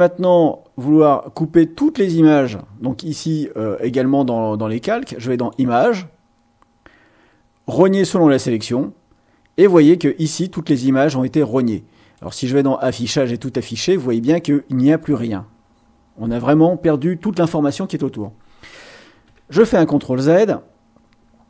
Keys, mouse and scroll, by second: 5.3 click, 8.5 click, 12.1 click, 12.9 click, 19.1 ctrl+z.